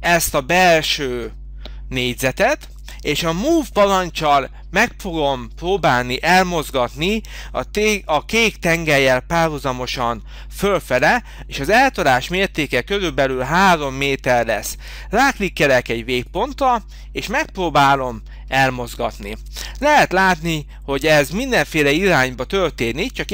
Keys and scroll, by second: 10.9 m.